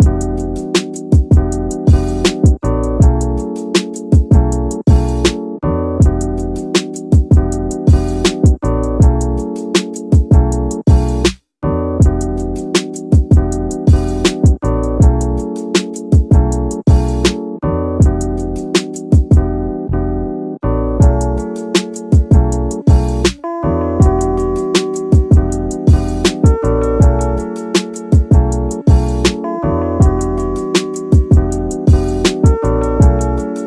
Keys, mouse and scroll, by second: 0.6-2.7 middle drag, 2.7 ctrl+s, 3.4-8.4 middle drag, 8.5 ctrl+s, 9.3 click, 11.1 KP_7, 11.8 a, 12.3-13.0 scroll up 2, 13.0 z, 15.1 scroll down 2, 15.3-16.5 middle drag, 16.5 click, 17.0 shift+click, 17.4 shift+click, 17.8 shift+click, 19.2-19.8 middle drag, 19.8 ctrl+click, 20.7 click, 21.3 click, 22.1 alt+a, 22.4 click, 23.3-24.5 middle drag, 24.5 click, 25.2-26.5 middle drag, 26.5 KP_7, 28.3 alt+d, 29.3 click, 29.6 r, 30.2 click, 30.3 g, 30.9 click, 31.2 alt+a, 31.6 ctrl+s, 31.7 ctrl+scroll down 1, 31.7 ctrl+s, 31.8-33.6 middle drag.